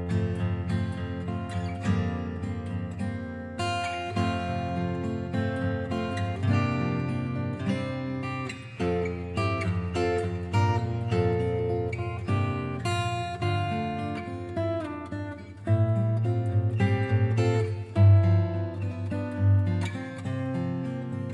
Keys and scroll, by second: 2.1 typing.